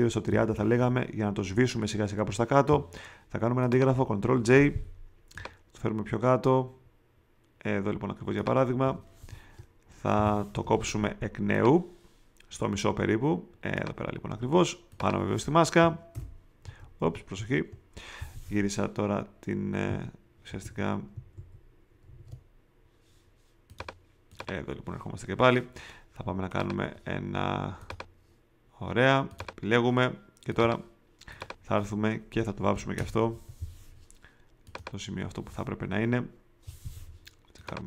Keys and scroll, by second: 0.2 3, 4.3 super+j, 5.3 shift+super+j, 16.1 alt+\, 16.7 alt+super+\, 17.0 alt+super+z, 19.8 q, 20.4 super+q, 20.6 super+z, 21.1 alt+super+z, 32.9 alt+BackSpace.